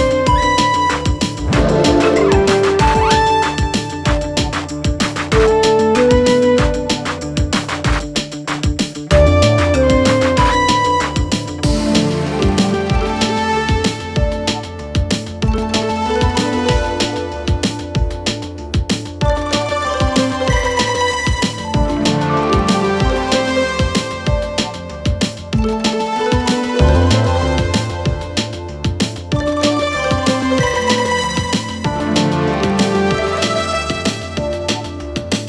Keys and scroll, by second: 1.2 4, 2.7 3, 4.9 4, 8.8 3, 11.7 4, 15.8 5, 18.1 3, 18.8 3, 19.2 [, 21.4 o, 21.7 Return, 29.2 ].